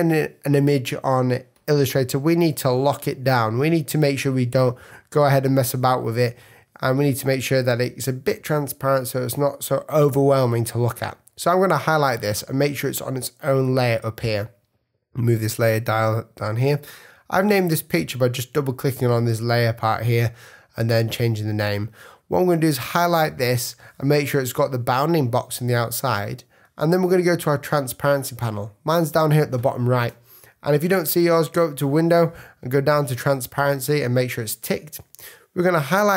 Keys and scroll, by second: 2.6 v, 6.0 super+z.